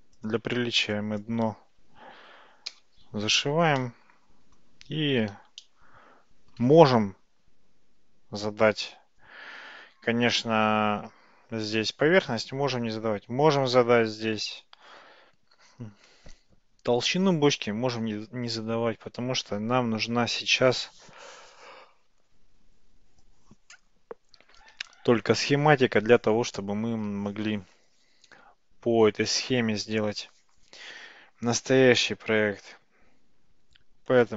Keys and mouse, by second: 0.3 click, 0.5 Tab, 1.0 click, 2.7 f, 3.1 Tab, 3.8-4.7 middle drag, 5.7-6.6 shift+middle drag.